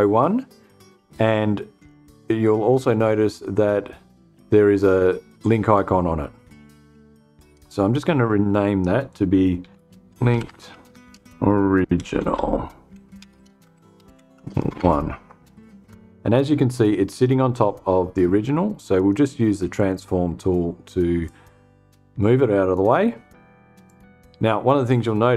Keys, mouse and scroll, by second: 7.0 F2, 8.9-14.5 typing, 18.4 click, 19.2 click, 20.7-22.4 drag, 23.3 click.